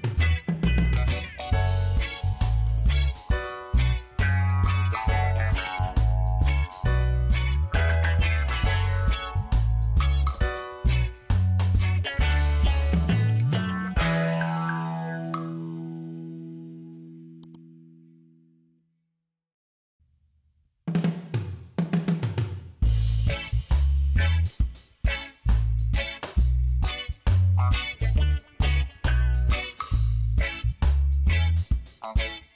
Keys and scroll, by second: 1.3 ctrl+j, 13.1 e, 13.8 e.